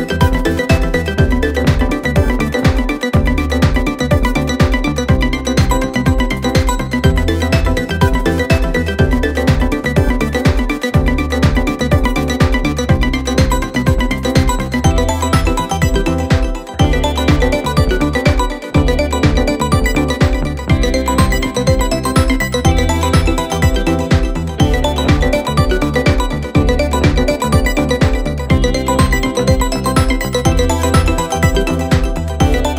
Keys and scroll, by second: 3.6 ctrl+d, 3.7 Escape, 9.6 p, 11.5 3, 13.5 p, 14.8 p, 16.1 p, 17.2 p, 17.9 p, 18.7 p, 20.5 p, 21.5 p, 22.7 p, 23.5 p, 24.6 p, 26.0 p, 26.7 p, 28.7 p, 29.6 p, 30.2 p, 30.9 p, 32.0-32.7 typing.